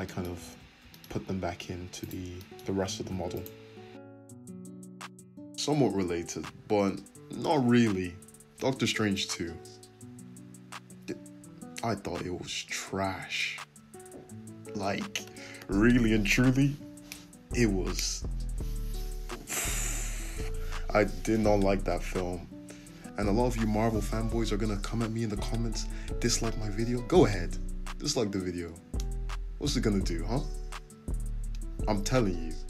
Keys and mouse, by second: 0.4 alt+z, 2.0 click, 2.0-4.1 shift+middle drag, 3.0 f, 4.1 right click, 4.1-5.9 middle drag, 4.3 f, 5.9 right click, 6.0-14.5 shift+middle drag, 6.7 f, 9.2 `, 15.1 Tab, 16.2 `, 18.3 Tab, 19.4 click, 19.9 click, 22.4 g, 23.7-28.2 shift+middle drag, 25.6 `, 26.0 `, 28.0 Tab, 29.8 Tab, 30.1 click, 31.3 f.